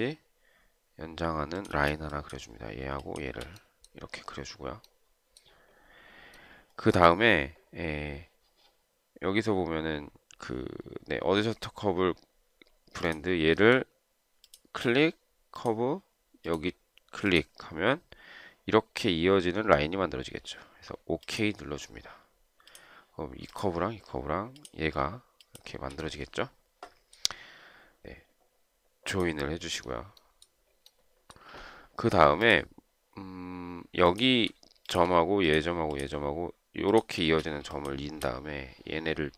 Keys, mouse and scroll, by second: 2.1 space, 3.3 shift+click, 23.9 shift+click, 24.9 shift+click, 35.2 shift+click, 37.5 space, 38.1 shift+click.